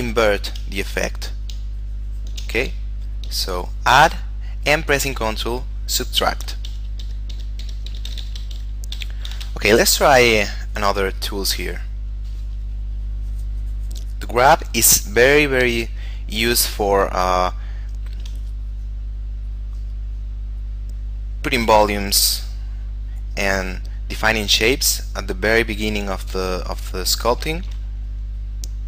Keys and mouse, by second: 0.9 click, 1.8 ctrl+click, 2.9 shift+middle click, 3.9 click, 5.4 ctrl+click, 6.6 ctrl+z, 7.5 ctrl+z, 8.0 ctrl+z, 8.7 ctrl+z, 9.9 shift+middle click, 11.4 click, 15.8 f, 17.0 click, 17.6 shift+middle click, 19.0 click, 27.5 shift+middle click, 28.2 click.